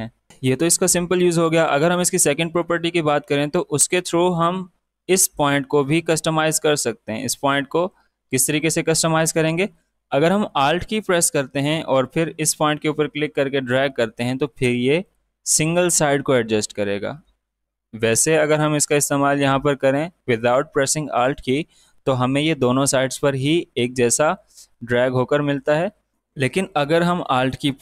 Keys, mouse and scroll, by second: 6.1-8.4 drag, 8.4 ctrl+z, 12.3-18.1 alt+drag, 19.0-26.1 drag, 26.1 ctrl+z.